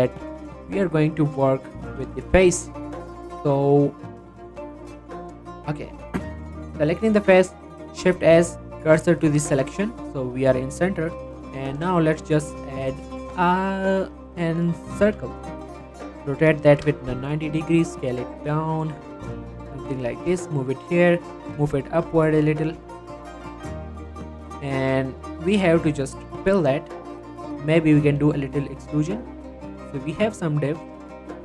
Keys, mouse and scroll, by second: 0.2 click, 1.0 shift+middle click, 1.2-1.6 shift+scroll up 2, 1.6 shift+middle click, 1.8 click, 2.0 Tab, 2.5 shift+middle click, 4.2 click, 4.6 ctrl+r, 5.4 right click, 6.4 click, 6.8-7.1 scroll down 1, 7.7 shift+s, 9.5 Tab, 10.5-11.2 scroll up 1, 11.4 click, 11.7 shift+a, 14.1 click, 14.8 r, 15.0 x, 17.5 s, 19.4 click, 19.9 g, 20.3 x, 21.3 click, 21.6 y, 22.2 z, 24.0 click, 24.2 Tab, 25.5 click, 26.3 f, 26.7 middle click, 27.4-28.0 scroll up 1, 28.0 e, 29.4 click, 29.6 Tab, 29.8 middle click, 30.0 scroll down 1, 30.3-31.4 middle drag.